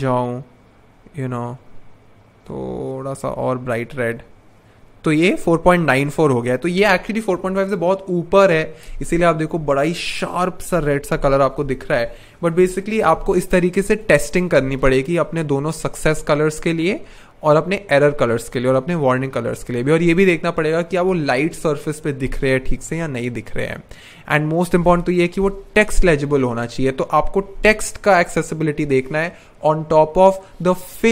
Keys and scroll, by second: 14.4 BackSpace.